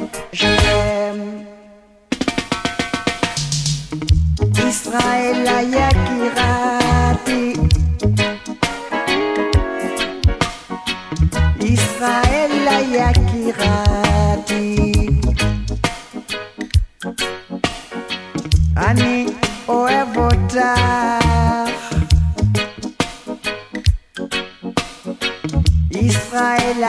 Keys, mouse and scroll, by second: 4.5-5.5 right drag, 5.9 click, 10.8 right click, 12.4 click, 13.9-14.2 alt+scroll down 1, 17.8 click, 22.3-22.8 scroll down 1, 24.3-25.7 drag.